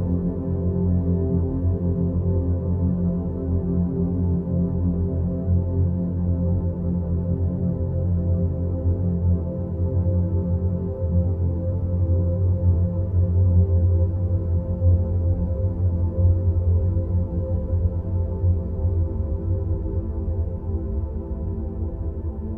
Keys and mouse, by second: 3.4-5.6 middle drag, 6.5 alt+g, 9.7 click, 11.0-15.0 middle drag, 16.1 Tab, 16.6 2, 18.5-19.6 middle drag, 20.2 click, 21.3 shift+click.